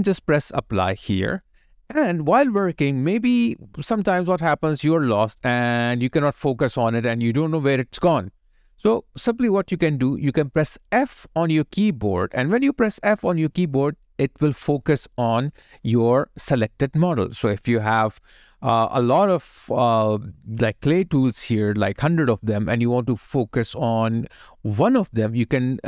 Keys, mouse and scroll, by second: 3.2-4.2 scroll down 1, 4.5 alt+middle click, 5.9 scroll up 1, 6.3-6.9 scroll down 1, 7.0 alt+middle click, 11.9 f.